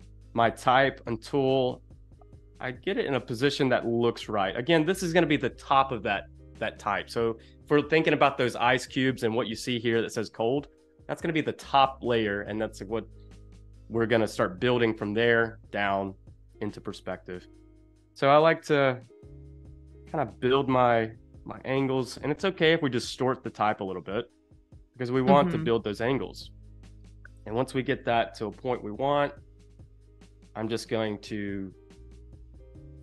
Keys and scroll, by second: 32.9 v.